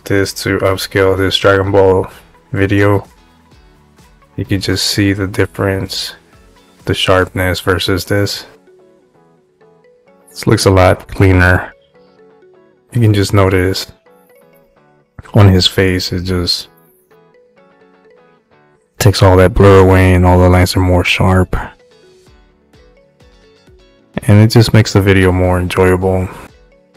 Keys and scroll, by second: 2.8 space, 4.6 space, 9.4 space, 14.5 space.